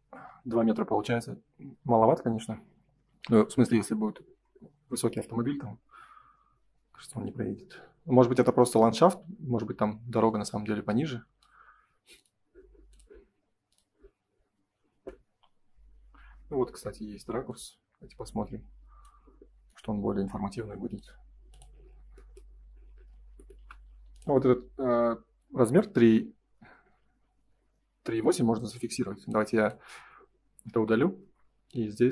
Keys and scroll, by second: 2.2 Escape, 2.9 space, 16.8 Print, 23.5 l, 28.1 Escape, 28.5 space, 30.7 Delete.